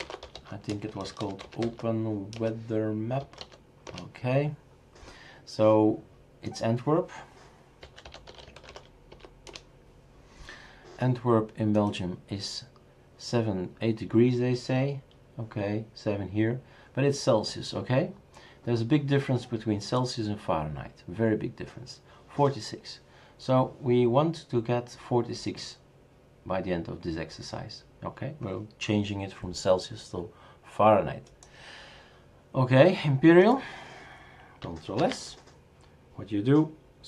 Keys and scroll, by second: 0.0-3.9 typing, 7.6-9.6 typing, 35.0 ctrl+s.